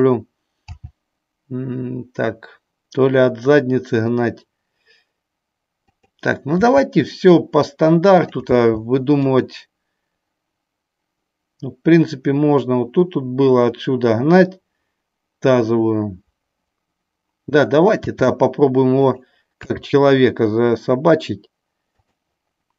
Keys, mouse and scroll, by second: 5.9 click, 8.1 click, 8.4 g, 9.2 click, 19.0 click, 19.7 g, 21.9 click.